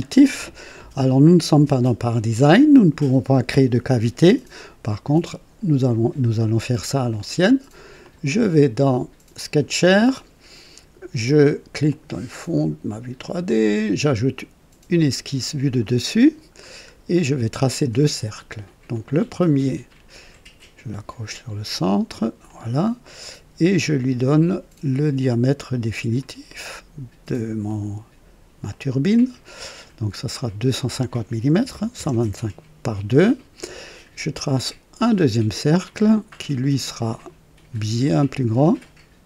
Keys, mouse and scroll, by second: 7.1 click, 8.0 click, 9.3 click, 11.8 click, 13.4 click, 15.8 click, 16.6 scroll down 2, 17.1 right click, 18.8 click, 22.4 click, 25.9 click, 26.4 right click, 27.6 right click, 28.7 click, 30.3 click, 31.5 KP_2, 31.6 KP_5, 31.9 KP_0, 32.1 Return, 34.9 click, 36.8 click, 38.0 click, 38.5 right click.